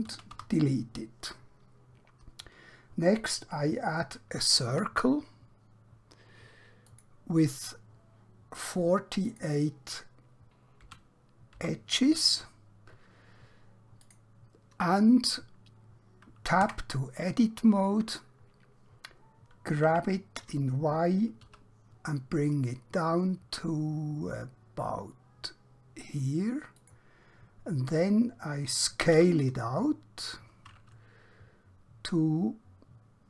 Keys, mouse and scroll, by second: 0.0 typing, 1.1 typing, 6.9 click, 10.8 4, 12.1 click, 16.7 Tab, 19.9 g, 21.4 typing, 26.8 click.